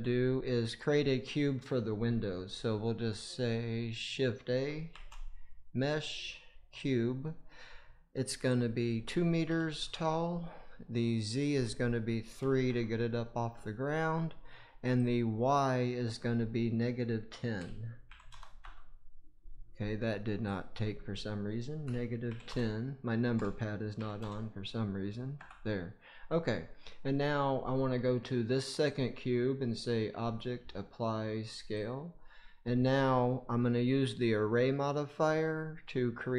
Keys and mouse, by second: 4.8 shift+a, 8.4-9.8 drag, 11.3-12.6 drag, 14.9-18.5 drag, 20.4-25.3 drag, 28.8-31.8 drag.